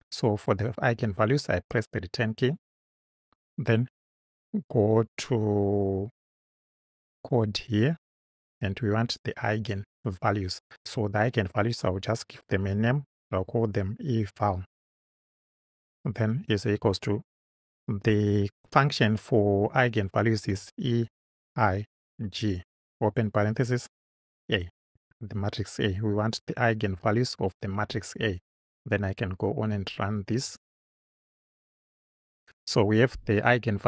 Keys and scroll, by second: 1.7 Return, 13.2 shift+e, 15.2-16.8 typing, 20.8-23.4 typing, 25.0 shift+a, 27.1 Right.